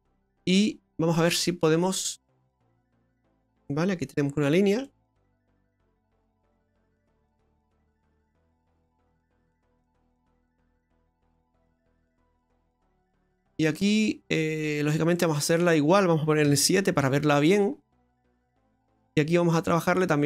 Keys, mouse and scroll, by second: 0.0 middle click, 1.9 middle click, 2.3-2.9 scroll up 3, 2.9 click, 5.4 click, 9.6 click, 14.9 scroll up 1, 15.2 middle click, 15.5 middle click, 16.5 KP_4, 16.5 KP_7, 17.3-17.9 scroll up 6, 18.1 shift+middle click.